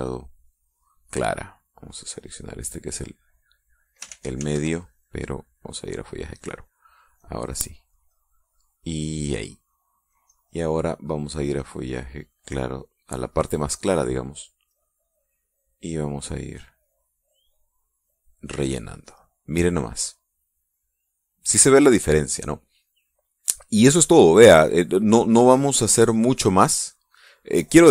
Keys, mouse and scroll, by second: 2.5 click, 3.7 click, 4.2 click, 4.8 ctrl+z, 6.1 click, 6.5 click, 7.8-9.0 drag, 10.8 click, 12.2 click, 12.6-13.8 drag, 14.0 click, 14.2 click, 15.0-16.0 drag, 17.2 click, 19.8 middle click, 22.9 middle click, 23.9-25.1 middle drag, 26.6 click.